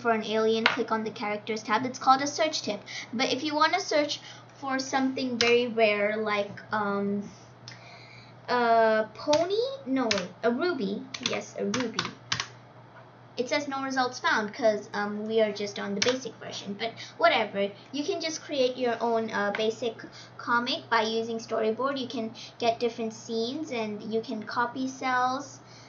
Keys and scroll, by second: 5.3 BackSpace, 9.2-12.4 typing, 15.9 BackSpace.